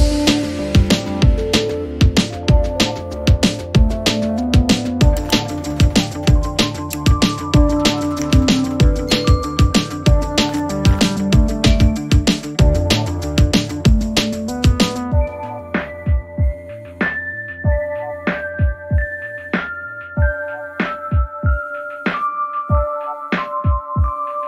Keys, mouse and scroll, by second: 3.0 click, 4.9 ctrl+click, 8.4 click, 9.1 click, 12.4 click, 18.0-18.7 typing, 18.3 click, 21.0 click, 22.5 6, 23.8 6.